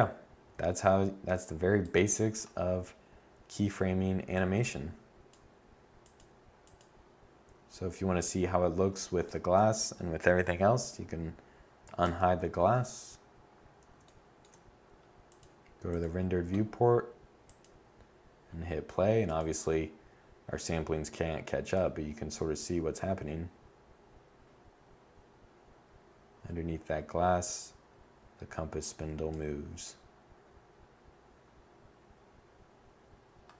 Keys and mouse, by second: 3.9-4.7 middle drag, 11.6 alt+h, 20.9 middle click.